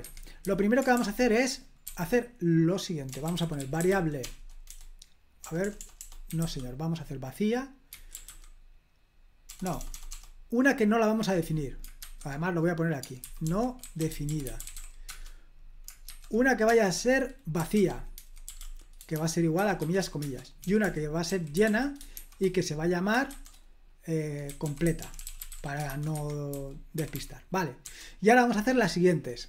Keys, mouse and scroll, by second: 0.4-10.0 typing, 11.9-16.0 typing, 17.3-22.6 typing, 20.2 Return, 24.2-27.8 typing, 29.2-29.4 typing.